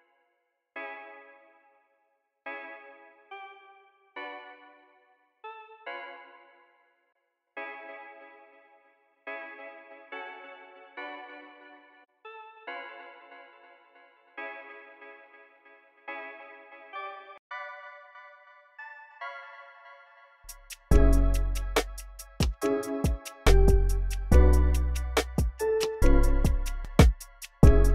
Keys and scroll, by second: 0.0 x, 0.2 x, 12.7 v, 15.0 v, 15.3 e, 15.9 v, 16.4 super+a, 16.8 alt+shift+Up, 17.1-18.5 typing, 19.4 super+a, 19.6 alt+shift+n, 20.2 s, 24.0 x, 24.3 x, 26.0-27.9 typing, 26.8 super+a, 27.2 alt+shift+Page_Down, 27.4 alt+shift+Page_Down.